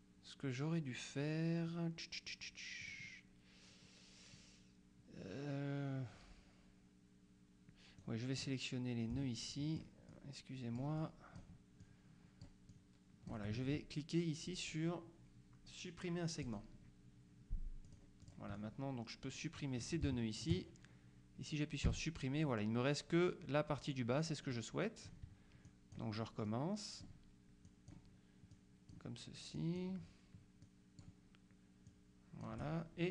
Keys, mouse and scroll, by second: 2.9 click, 8.1 click, 9.2 shift+click, 11.1 click, 11.9 click, 12.8 click, 16.5 click, 18.0 click, 20.1 shift+click, 22.0 Delete, 24.6-25.7 drag, 25.7 shift+click, 27.7 click, 28.6 click, 29.6 click, 30.7 click, 31.9 click.